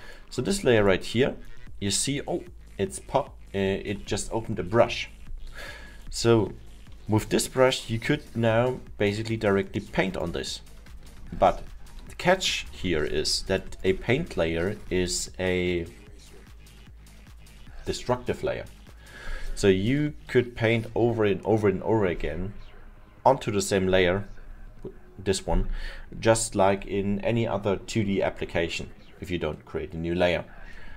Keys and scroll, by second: 12.6 ctrl+z.